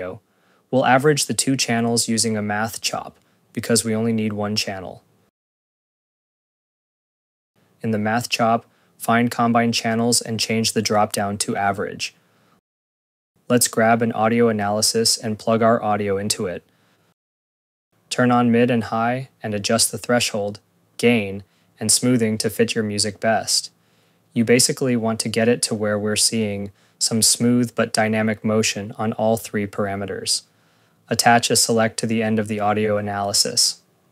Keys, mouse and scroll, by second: 1.0 Tab, 1.6-2.9 typing, 3.6 click, 5.7 click, 6.9 click, 12.4 click, 14.7 click, 14.9 click, 15.6 click, 15.8 scroll, 16.6 scroll, 17.2 click, 18.4 click, 26.1 scroll, 27.7 ctrl+s, 30.3 click, 31.3 right click, 33.1 Return, 33.8 click.